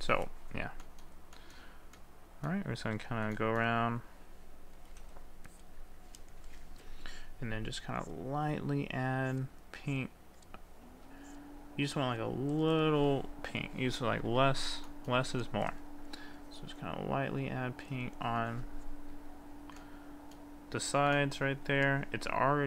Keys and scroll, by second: 6.5 ctrl+z.